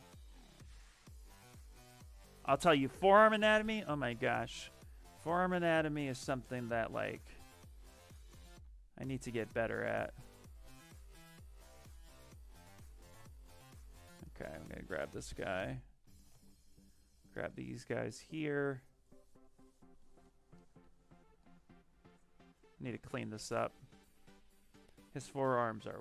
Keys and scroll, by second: 6.8 s, 7.6 s, 20.7 s, 24.2 s.